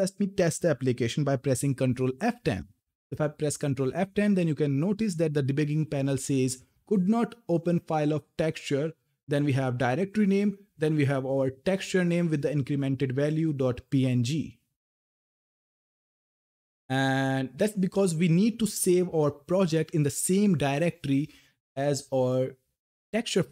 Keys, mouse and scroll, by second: 0.8 ctrl+Num_Lock, 2.2 ctrl+F10, 21.9 click.